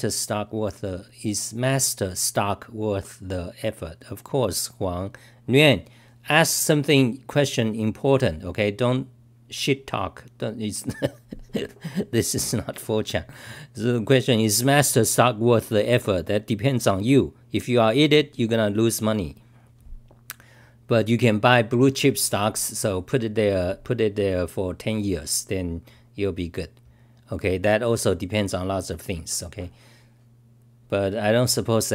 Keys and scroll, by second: 26.9 typing.